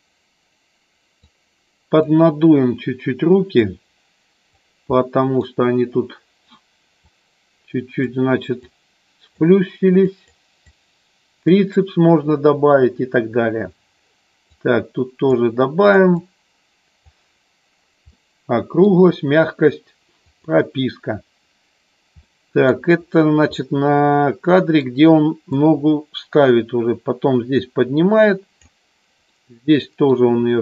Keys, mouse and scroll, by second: 1.1 click, 3.5 click, 4.9 middle click, 7.0 click, 8.5 click, 10.1 click, 10.7 click, 14.4 click, 15.8 click, 16.1 click, 18.0 middle click, 22.1 middle click, 23.5-24.8 middle drag, 25.5-28.6 drag, 29.3 middle click.